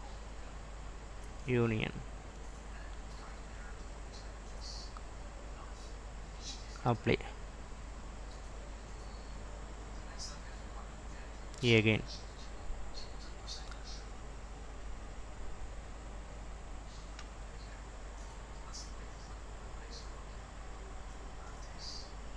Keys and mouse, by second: 4.7 click, 6.4-10.7 drag, 11.7-13.9 drag, 15.5 click, 16.7-21.4 drag.